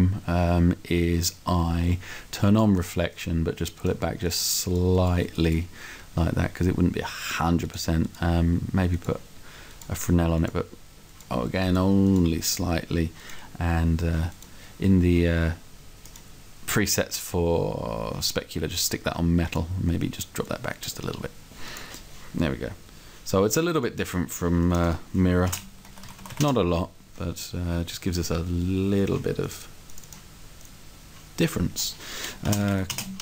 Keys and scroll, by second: 25.5-26.3 typing, 26.5 Return, 32.5 shift+r, 32.6 e, 32.8 d, 33.0 space.